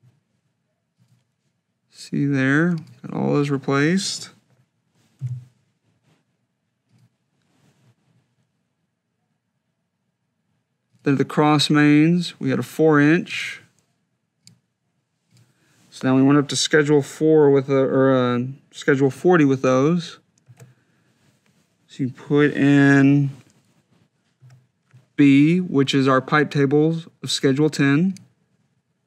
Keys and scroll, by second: 5.0 2, 20.7 shift+b, 24.6 4.